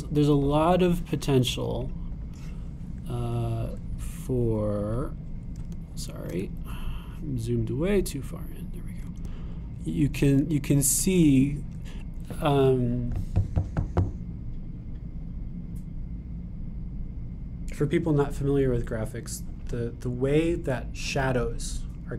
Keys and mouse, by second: 1.1-10.0 drag, 10.2-11.3 shift+drag, 11.5 super+click, 12.1 super+click, 13.0-22.1 drag.